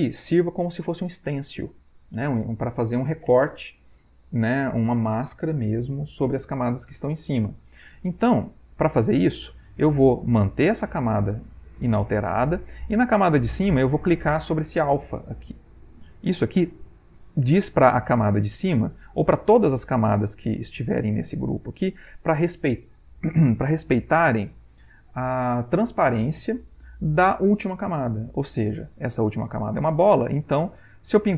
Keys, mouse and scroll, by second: 16.4 click, 19.9 click.